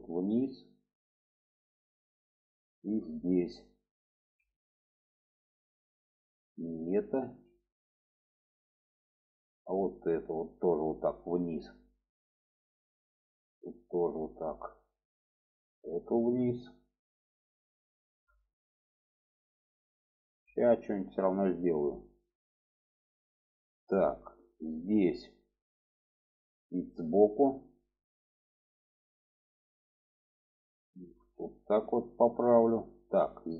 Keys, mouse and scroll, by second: 0.1-1.7 drag, 1.9 shift+middle click, 3.2 shift+middle click, 4.1 alt+z, 5.6-6.6 drag, 7.2 ctrl+z, 8.9-11.1 drag, 12.0 shift+middle click, 13.2 click, 13.7 click, 14.7 shift+middle click, 15.7 click, 16.2-17.3 drag, 17.9 alt+z, 18.4 shift+middle click, 19.3 shift+middle click, 20.7 shift+middle click, 22.7 shift+middle click, 24.1 shift+middle click, 25.8-27.2 middle drag, 27.5 shift+middle click, 29.5 click, 30.5-31.6 drag, 32.1 shift+middle click, 33.2 alt+z.